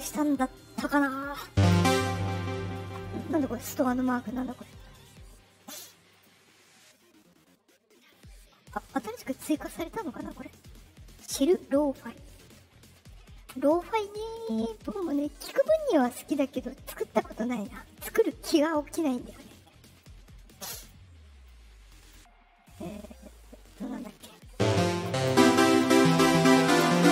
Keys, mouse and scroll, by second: 4.2 click, 6.1 click, 14.9 click, 17.6-18.9 drag, 19.9 click, 21.4-22.0 drag.